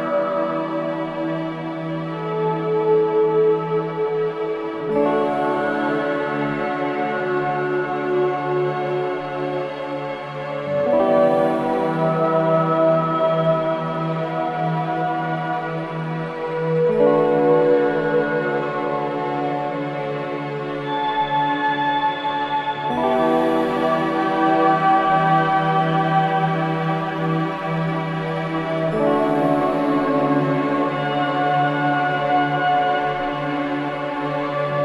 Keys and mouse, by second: 0.0-2.7 drag, 2.9 shift+click, 4.2-4.9 drag, 5.5 shift+click, 7.0 g, 8.0 Escape, 9.0-9.8 shift+drag, 10.4-11.4 shift+drag, 12.4 ctrl+l, 13.5 Return, 14.8 click, 18.7-20.1 drag, 20.4 ctrl+click, 20.9 ctrl+c, 21.4-23.9 drag, 23.7 Delete, 24.9-25.9 ctrl+drag, 25.3 ctrl+v, 26.1-27.5 drag, 27.6 click, 28.6 click, 30.5 click, 31.3 click, 32.4-33.2 drag.